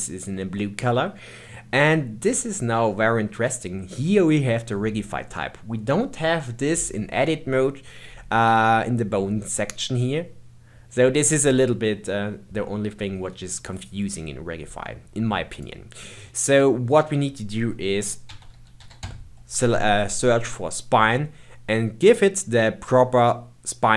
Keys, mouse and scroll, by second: 2.8-5.9 scroll down 5, 15.5-18.6 drag.